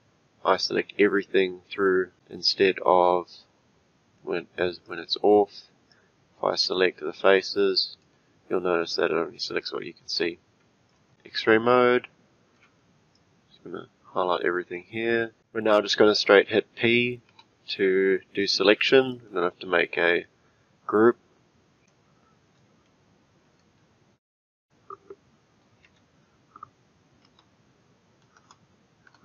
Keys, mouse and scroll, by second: 2.5 click, 4.8-6.0 drag, 7.4-10.9 shift+middle drag, 10.9 click, 11.1-13.1 middle drag, 13.1 click, 17.3 p, 21.9-24.6 shift+middle drag, 24.6 click, 25.8 F2, 28.3 BackSpace, 28.4 BackSpace.